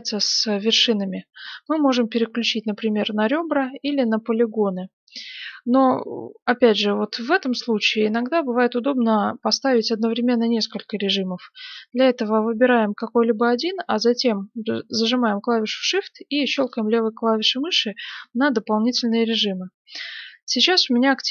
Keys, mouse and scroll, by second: 1.6-3.3 drag, 3.7-5.5 drag, 4.5-7.2 middle drag, 9.1-10.9 drag, 16.6-21.3 drag.